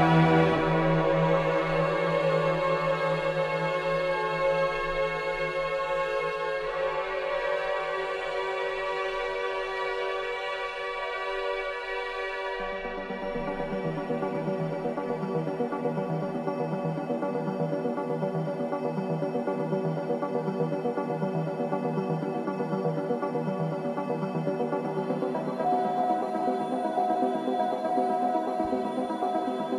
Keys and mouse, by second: 0.5 click, 2.0 h, 2.7-3.5 middle drag, 3.7 Tab, 4.2 click, 4.7 Tab, 5.3 middle click, 6.8 shift+middle click, 9.3-9.9 shift+middle drag, 12.2-13.1 middle drag, 15.6 alt+shift+click, 17.5 s, 22.0 e, 25.5 Tab, 26.1-27.5 middle drag.